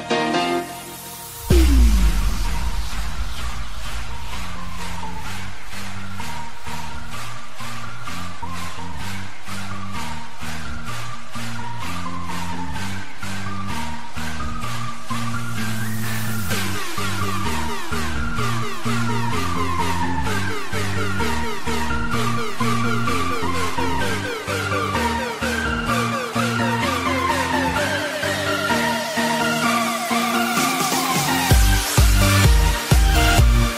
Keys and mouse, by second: 0.6 click, 1.5 click, 2.1 click, 4.8 click, 9.9 click, 10.9 click, 11.6 click, 12.5 click, 14.5 click, 16.5 click, 17.1 click, 17.6 click, 17.8 click, 18.3 click, 22.1 click, 25.9 click, 27.9 u, 28.4 click.